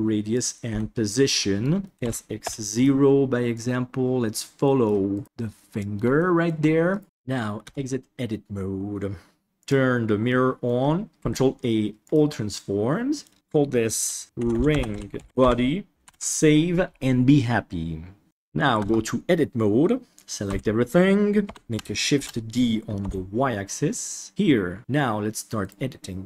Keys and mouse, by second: 0.6 KP_1, 1.8 shift+middle click, 1.9 s, 3.6-4.8 drag, 5.1 right click, 5.2 click, 6.1 shift+middle click, 6.9 right click, 7.0 Tab, 7.8 click, 8.5-9.6 drag, 10.2-10.6 middle drag, 11.1 ctrl+a, 12.5-13.3 middle drag, 14.1 shift+F2, 16.1 ctrl+s, 18.4 middle click, 18.8 Tab, 20.5 a, 21.4 KP_3, 22.2 shift+d, 25.6 right click.